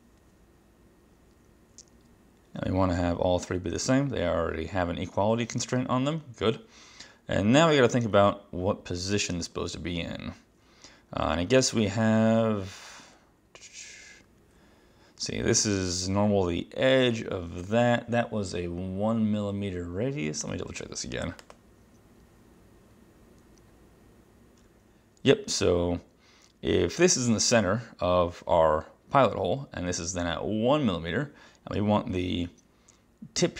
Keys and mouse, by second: 20.5 click, 21.5 click.